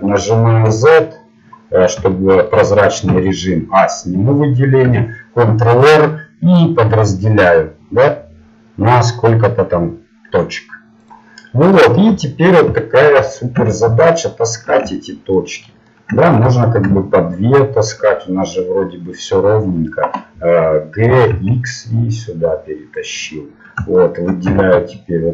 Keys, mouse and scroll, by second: 3.1 a, 4.9 ctrl+r, 12.1 scroll up 1, 13.6 a, 14.6-15.7 drag, 15.7-18.0 middle drag, 18.0-19.1 drag, 19.1-21.1 middle drag, 21.1 g, 23.3 middle click, 24.6 a.